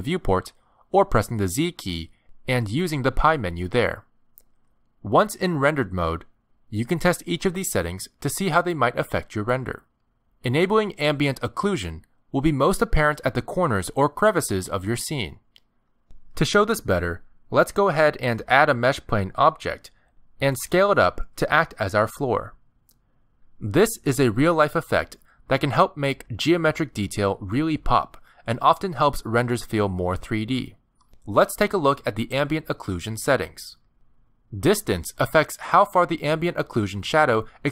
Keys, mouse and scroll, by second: 1.0 z, 8.6 click, 9.3 click, 13.5 shift+a, 14.8 Tab, 15.1 s, 16.1 Tab, 16.7-17.2 scroll up 6, 24.0 click, 24.8 click, 25.6 middle click, 26.7 scroll up 2, 28.1 click, 28.5 click, 29.0 middle click, 30.7-31.1 scroll down 2, 31.1 middle click, 33.0 scroll down 1, 33.7 click, 35.6 click.